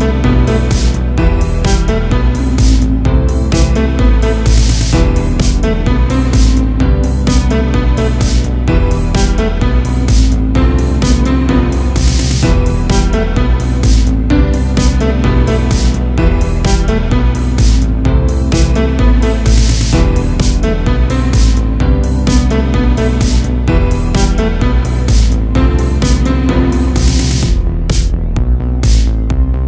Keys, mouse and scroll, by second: 0.7-1.9 middle drag, 1.9 click, 7.1 click, 9.7-12.4 drag, 12.4-13.1 scroll down 4, 13.1-13.8 middle drag, 13.8 click, 14.4 ctrl+t, 15.2 click, 15.9 Delete, 16.9 click, 19.7-21.2 middle drag, 21.2 click, 23.2-23.5 scroll up 1, 23.5 a, 23.7 a, 24.7-25.3 middle drag, 25.3-26.7 scroll up 7, 26.7-29.6 drag.